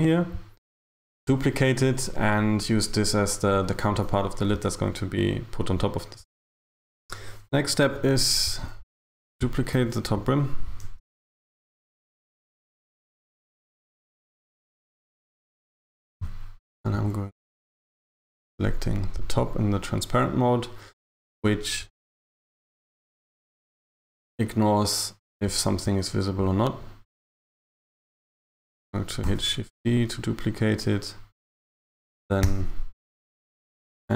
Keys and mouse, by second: 9.8 KP_1, 10.9 z, 14.1 KP_1, 15.2 a, 15.4 a, 17.0 b, 29.3 shift+d.